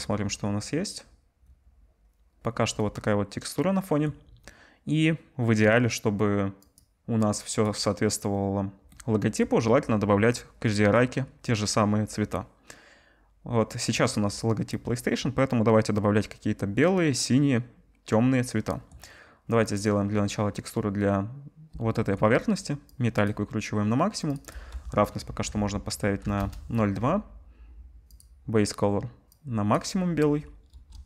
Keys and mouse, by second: 28.2-31.0 drag, 30.7 KP_0.